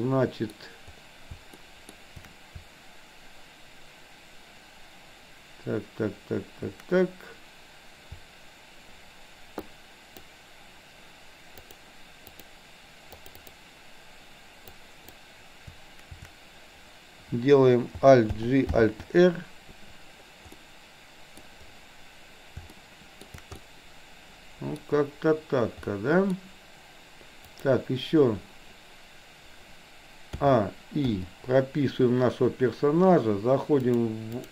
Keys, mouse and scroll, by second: 1.6 shift+middle click, 9.6 shift+click, 11.6 shift+click, 12.3 shift+click, 13.2 shift+click, 14.7 shift+click, 18.3 alt+g, 18.7 alt+r, 20.4 middle click, 22.8 shift+middle click, 23.7-24.8 middle drag, 25.9 middle click, 27.6 click, 30.3 a, 31.1 i, 33.8-34.4 drag.